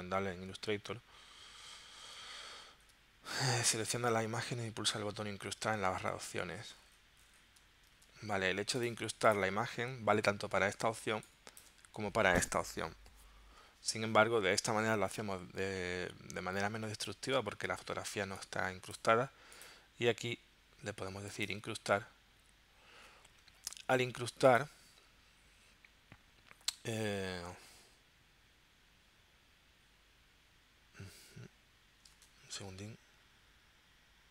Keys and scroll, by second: 8.0 super+Tab, 11.0 space, 18.1 space, 32.1 super+Tab.